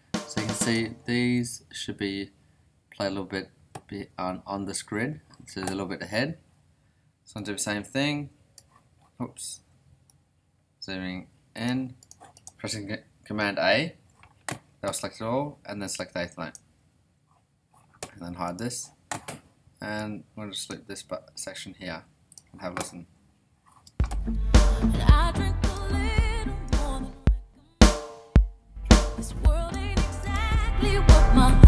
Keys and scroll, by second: 13.9 super+a, 23.8 space.